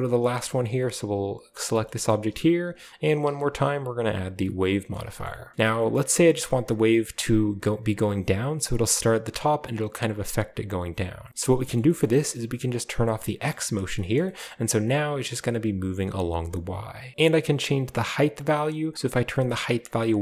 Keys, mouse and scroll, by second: 0.7-1.5 right drag, 1.5 middle drag, 1.8 shift+middle click, 2.0-2.8 shift+middle drag, 2.6 click, 3.0 typing, 3.9 click, 4.4-5.0 middle drag, 5.2 middle click, 5.5 middle drag, 5.6-6.0 scroll up 1, 5.9-6.6 middle drag, 6.0-6.9 scroll down 1, 11.3 scroll up 1, 11.3 scroll down 1, 12.1-13.0 shift+middle drag, 12.1 scroll down 1, 13.4 click, 13.7-14.3 scroll down 1, 13.9-14.3 shift+middle drag, 14.3-15.3 scroll up 2, 17.1-19.4 drag, 19.8-20.2 scroll up 2.